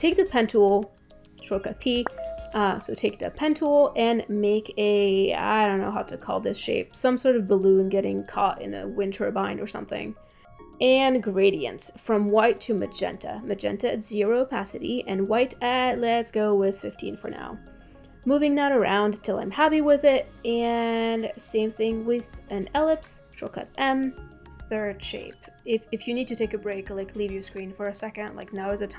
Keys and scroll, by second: 2.0 p.